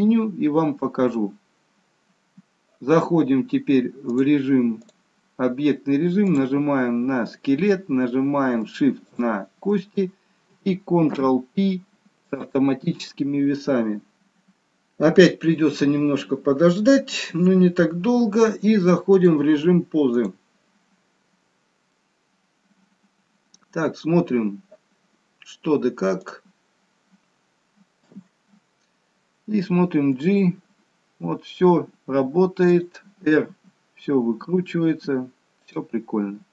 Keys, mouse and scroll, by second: 0.2-1.1 scroll up 1, 4.1 click, 6.2 click, 6.8-8.5 scroll down 1, 8.9 shift+click, 10.9 ctrl+p, 19.0 click, 21.2-21.9 scroll up 1, 21.9 middle click, 26.1 click, 26.8-28.0 scroll down 1, 28.0 KP_3, 30.3 g, 33.6 r.